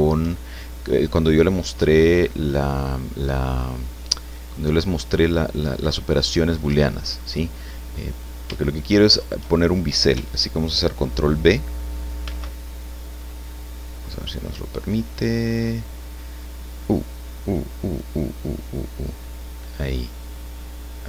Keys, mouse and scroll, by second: 7.7-8.1 scroll up 1, 8.5 shift+middle click, 12.2 ctrl+b.